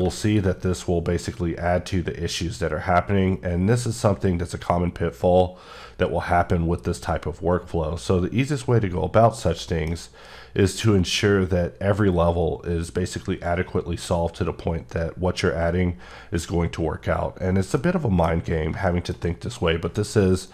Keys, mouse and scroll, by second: 0.2 ctrl+click, 8.4 click, 9.0 scroll up 2, 9.7 shift+middle click, 17.1-17.7 scroll down 1, 17.7 middle click, 18.0 scroll down 1, 18.5 scroll up 1, 18.9 shift+middle click.